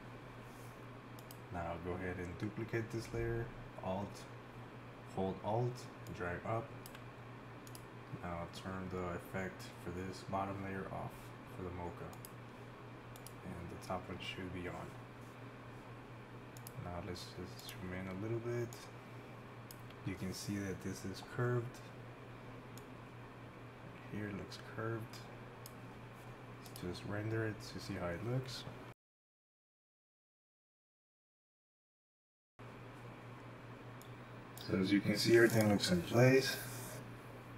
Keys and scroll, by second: 36.2 Home, 36.9 shift+Right.